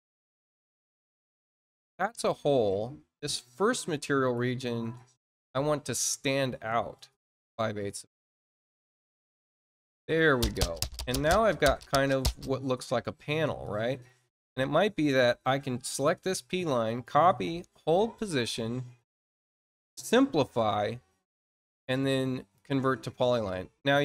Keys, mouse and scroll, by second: 0.6 click, 2.2 click, 3.5 click, 6.9 click, 8.2 click, 13.4 click, 14.5 click, 16.8 click, 17.9 click, 19.8 click, 22.0 click.